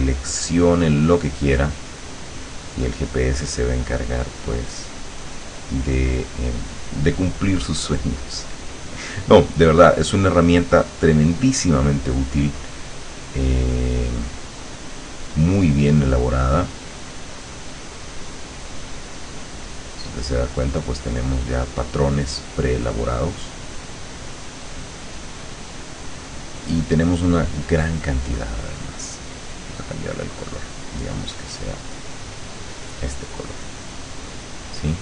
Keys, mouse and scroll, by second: 0.6 click, 2.2 click, 3.2 click, 3.6-5.4 drag, 8.6 click, 10.3 click, 12.9 click, 14.8 click, 16.0 click, 17.0-18.9 drag, 19.1 click, 20.6 click, 21.1 click, 22.5 click, 23.5 click, 27.6 click, 29.6 click, 31.0 click, 32.0 click, 32.9 click, 33.4-34.8 drag.